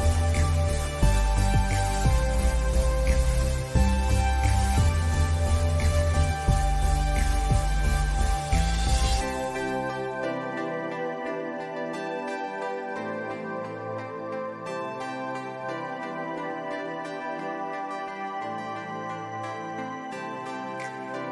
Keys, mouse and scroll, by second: 0.1 space, 0.5 alt+scroll up 1, 0.6 click, 0.9 space, 1.2 ctrl+s, 1.2 click, 1.7 alt+scroll up 1, 2.0 click, 2.6 scroll down 1, 2.7 scroll up 1, 2.8 scroll down 1, 3.1-4.6 drag, 6.4 click, 8.1 click, 9.2 ctrl+z, 9.6-11.2 drag, 11.2 alt+scroll up 1, 11.3 click, 12.8 ctrl+shift+[, 13.1 alt+scroll down 1, 13.2 alt+scroll up 1, 13.5 click, 14.7 ctrl+z, 14.8 click, 15.7 click, 16.3 click, 16.6 ctrl+z, 16.8 click, 17.1 alt+scroll down 1, 17.3 click, 17.7 alt+scroll down 1, 17.9 click, 18.6 alt+scroll up 1, 18.7 space, 18.9 click, 19.9 scroll down 1, 20.1 alt+scroll up 1, 20.3 click.